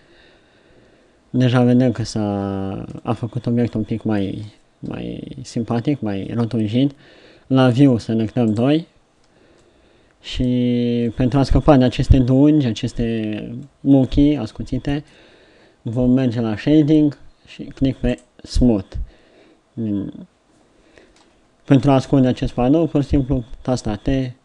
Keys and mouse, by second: 3.6-4.8 middle drag, 4.9 KP_7, 22.9 t, 23.6 t.